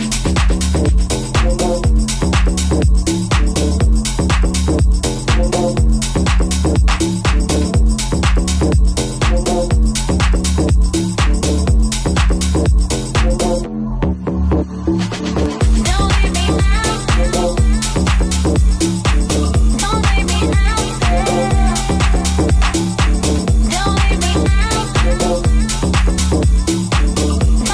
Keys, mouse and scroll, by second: 3.2 alt+right click, 3.8 ctrl+b, 6.5 alt+right click, 7.4 ctrl+b, 10.6 Tab, 13.0 Tab, 14.2-19.5 middle drag, 16.8 Tab, 19.5-26.5 alt+shift+middle drag, 20.3 ctrl+b, 21.9 ctrl+Tab, 22.4 1, 23.0 Tab, 26.5 right click, 26.5-27.7 middle drag, 27.5 alt+z.